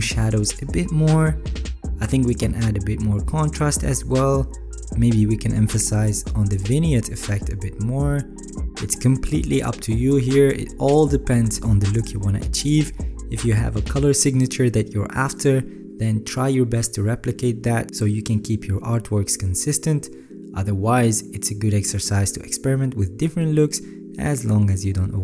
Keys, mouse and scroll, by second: 17.1 ctrl+s, 18.9 alt+scroll, 21.3 alt+middle click.